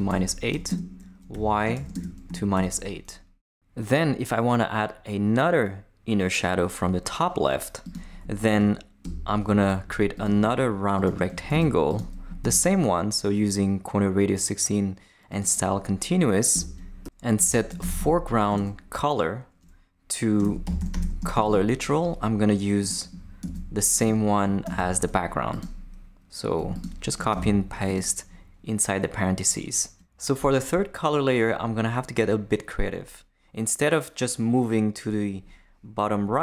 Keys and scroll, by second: 0.0-2.5 typing, 8.5 Return, 11.5 shift+super+c, 12.2 super+c, 12.4 super+v, 16.5 Return, 17.1-18.5 typing, 18.5 Return, 20.2-21.9 typing, 23.4 super+c, 24.6 super+c, 27.3 super+v.